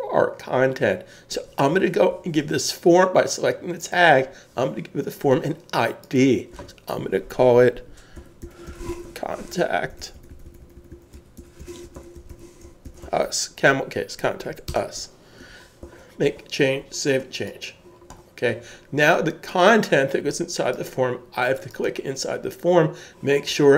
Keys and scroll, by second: 8.2-9.6 typing, 11.1-13.5 typing, 14.7 Return, 15.8 super+s.